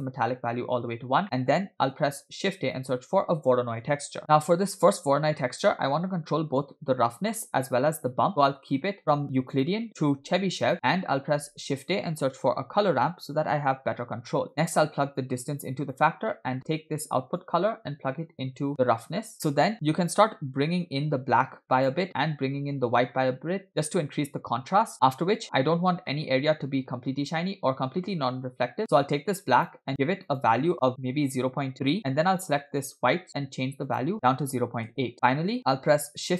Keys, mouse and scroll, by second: 0.8-1.2 scroll down 2, 1.2 middle click, 2.1 shift+a, 4.4-4.9 scroll up 2, 4.9 click, 7.3 middle click, 8.3 scroll down 2, 8.4 middle click, 8.7-9.4 scroll up 3, 9.5-10.7 drag, 10.7-11.3 scroll down 2, 11.3 shift+a, 15.3-16.1 drag, 16.4 middle click, 17.5-19.1 drag, 19.5 middle click, 19.7-20.7 scroll up 1, 20.7-21.9 drag, 23.0-25.0 drag, 26.1 middle click, 26.4-28.8 scroll up 1, 28.8 click, 29.6 click, 32.7 click, 35.1-35.8 scroll down 3, 35.2 middle click, 35.9 shift+a.